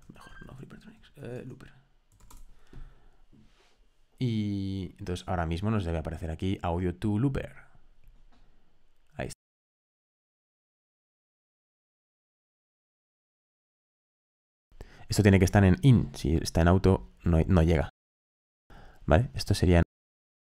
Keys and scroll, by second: 0.0-2.6 typing.